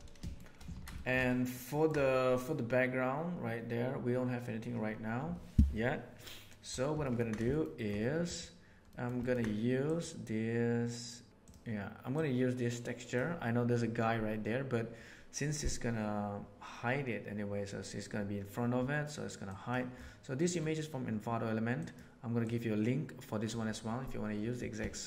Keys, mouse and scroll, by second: 0.2 shift+middle click, 0.7 alt+a, 0.9 shift+middle click, 1.2 ctrl+middle drag, 1.6 ctrl+middle click, 6.9 ctrl+middle click, 7.4 shift+middle click, 7.7 shift+middle click, 8.8 middle click, 9.2 ctrl+middle click, 24.9 middle click.